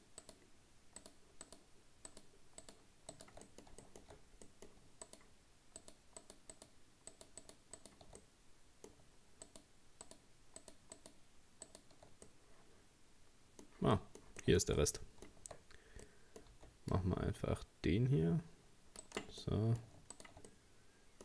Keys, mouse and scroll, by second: 0.2 shift+right click, 1.0 shift+right click, 1.5 shift+right click, 2.1 shift+right click, 2.6 shift+right click, 3.1 shift+right click, 3.5 middle click, 4.1-4.5 shift+scroll up 2, 4.5 middle click, 5.1 shift+right click, 5.8 shift+right click, 6.2 shift+right click, 6.5 shift+right click, 7.1 shift+right click, 7.4 shift+right click, 7.8 shift+right click, 8.2-9.5 middle drag, 9.5 shift+right click, 10.1 shift+right click, 10.6 shift+right click, 11.0 shift+right click, 11.7 shift+right click, 12.3-16.5 middle drag, 16.5 c, 19.4 middle click, 20.2 shift+right click, 20.5-21.2 middle drag.